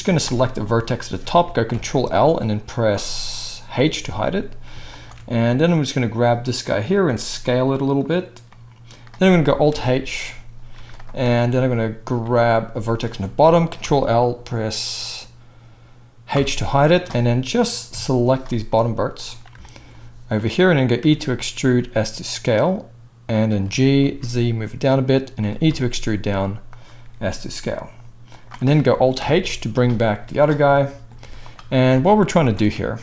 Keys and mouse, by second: 0.0 z, 1.7 ctrl+l, 3.8 h, 5.0-9.4 alt+shift+middle drag, 7.0 s, 9.6 alt+h, 10.7 z, 12.1 z, 12.7 click, 13.8 ctrl+l, 16.3 h, 17.9 KP_1, 18.9-23.4 drag, 21.8 e, 23.4-25.4 middle drag, 23.6 g, 25.4 e, 27.0 s, 29.1 alt+h, 30.1 z, 31.2 z, 31.9 alt+a, 32.4 alt+shift+click.